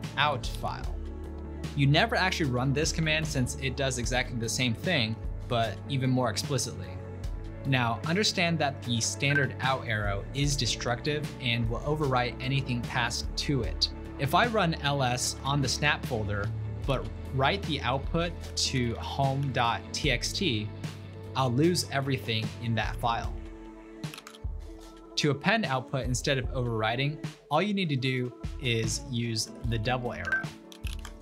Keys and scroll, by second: 2.1 typing, 4.4-4.7 typing, 7.1 typing, 9.3 typing, 10.9 ctrl+l, 16.2-20.0 typing, 21.6-24.7 typing, 29.3-31.2 typing.